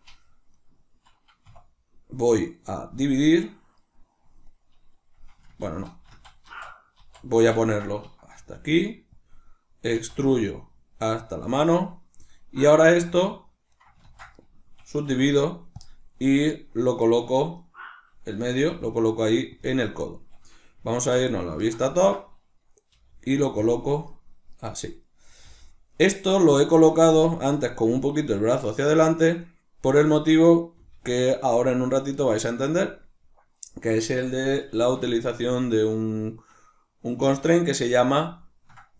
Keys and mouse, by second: 0.5 right click, 1.5 w, 3.7 right click, 4.5 right click, 5.5 ctrl+z, 9.3 click, 10.0 e, 11.3 click, 12.2 right click, 13.0 e, 13.8 right click, 14.0 ctrl+z, 14.4 right click, 15.1 w, 16.5 right click, 17.0 right click, 17.4 right click, 17.6 right click, 18.6 g, 19.6 click, 21.0 alt+q, 21.6-23.7 ctrl+shift+middle drag, 23.0 g, 23.7 click, 24.1 right click, 24.6 right click, 25.0 right click, 25.4 g, 26.6 click, 28.5 right click, 28.8 right click, 29.0 right click, 29.2 right click, 29.4 right click, 29.9 right click, 30.0 right click, 30.7 g, 32.9 click, 34.7 alt+o, 35.6 right click, 37.2 l, 38.2-38.9 ctrl+middle drag.